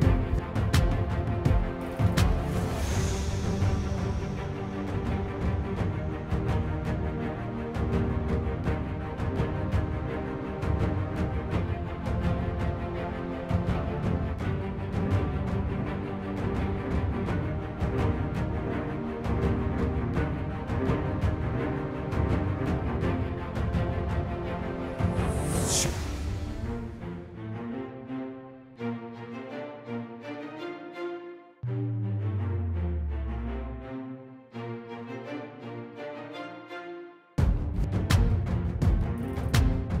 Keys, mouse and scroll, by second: 2.5 click, 9.3 click, 19.3 middle click, 21.2 middle click, 21.5 middle click, 21.7 middle click, 22.0 middle click, 22.9 middle click, 23.2 middle click, 23.9 middle click, 24.7 middle click, 25.2 middle click, 25.8 middle click, 26.1 middle click, 26.3 middle click, 26.6 middle click, 27.2 middle click, 27.6 middle click, 28.0 middle click, 28.7 middle click, 29.2 middle click, 29.4 middle click, 30.3 middle click, 31.5 middle click, 31.8 middle click, 37.6 middle click, 38.1 middle click, 38.6 middle click, 38.9 middle click.